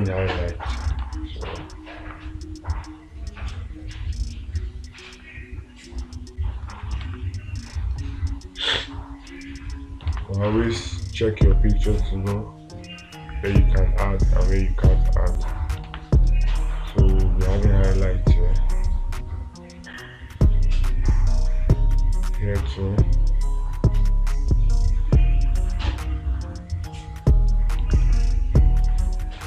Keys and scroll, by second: 1.5 space, 7.5 space, 10.6 space, 16.3 space.